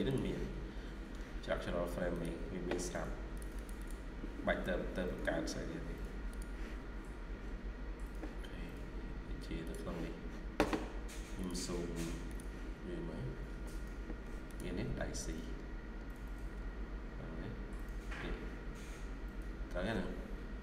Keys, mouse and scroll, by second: 0.0 double click, 3.4 double click, 13.8 ctrl+scroll up 3, 14.3-15.0 ctrl+scroll up 1, 17.8-18.2 scroll down 1, 18.2 scroll up 2.